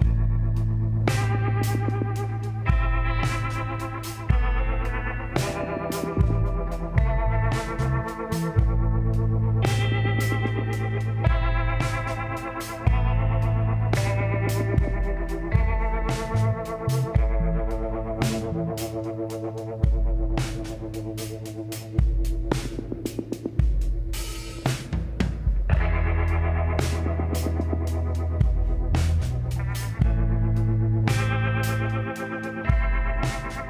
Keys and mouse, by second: 2.7 l, 4.7 s, 7.3-9.2 middle drag, 9.8 shift+d, 11.4 r, 18.2-19.7 middle drag, 19.7 l, 20.3 l, 21.4 t, 23.7-25.0 drag, 25.0 shift+d, 26.1 r, 30.9-32.8 middle drag, 32.8 l, 33.4 l.